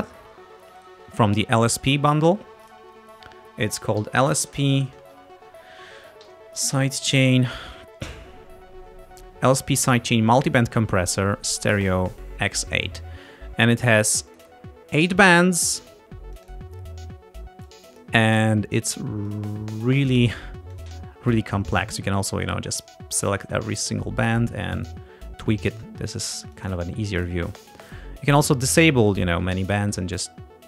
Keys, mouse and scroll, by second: 0.8 click, 2.9 click, 3.8-7.3 typing, 7.9-8.3 scroll down 2, 14.3 click, 15.2 click, 16.4 click, 17.7 click, 19.3 click, 20.8 click, 22.0 click, 22.8 click, 23.4 click, 24.8 click, 26.6 click, 27.2 click, 27.9 click, 29.7 click.